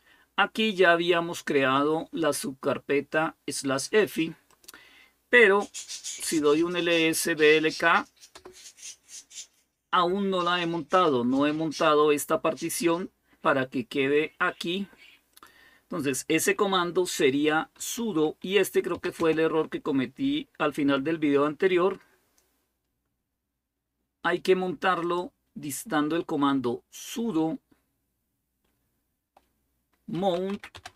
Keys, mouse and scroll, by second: 2.1-5.3 drag, 5.8-7.5 typing, 8.1 Return, 10.3-12.5 drag, 13.9-16.6 drag, 17.3-19.3 typing, 22.7-24.8 scroll down 1, 24.8-29.9 right drag, 29.7-30.9 typing.